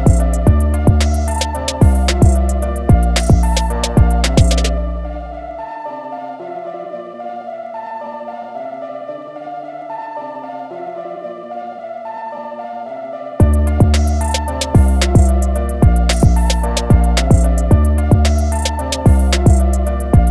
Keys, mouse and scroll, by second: 1.9 click, 6.5 ctrl+a, 7.2 shift+m, 10.7 click, 12.7 alt+click, 14.2 alt+click, 15.0-16.3 alt+scroll up 1, 16.3 alt+click, 17.9 click.